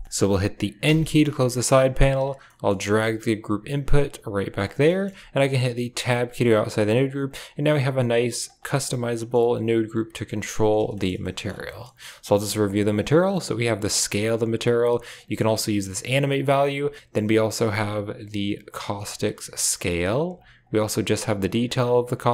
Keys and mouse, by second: 0.0 middle drag, 0.7 n, 1.4 middle click, 2.1 right drag, 2.3 middle click, 2.7 g, 4.7 click, 5.9 Tab, 8.1 click, 8.6 middle click, 9.0 middle click, 10.3 click, 11.0 middle click, 11.2 ctrl+middle click, 11.5 middle click, 12.0 middle click, 12.4 ctrl+s, 12.8-14.5 drag, 15.1-16.7 drag, 17.9-20.2 drag, 20.5-21.8 drag.